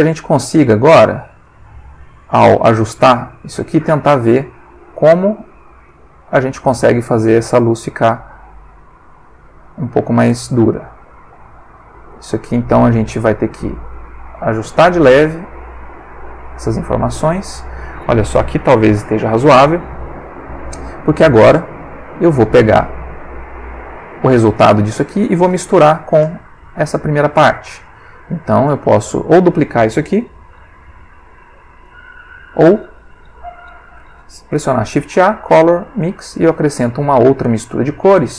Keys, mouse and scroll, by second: 0.5-1.1 drag, 1.5-2.3 drag, 2.4-3.0 drag, 3.2-3.8 drag, 4.1-4.6 drag, 4.7-5.5 drag, 5.9-6.4 drag, 7.0 click, 7.7 click, 9.1-9.8 drag, 10.5 click, 11.1 click, 11.8 click, 13.0 click, 13.9 click, 15.2 click, 20.4 click, 21.6 click, 22.7 click, 23.8 click, 24.5 click, 25.5 click, 26.4 middle click, 27.2 click, 27.8 click, 28.7 click, 30.7 shift+d, 31.9 click, 33.7 ctrl+x, 34.5 shift+a, 36.0 click, 36.8 click, 37.4 click.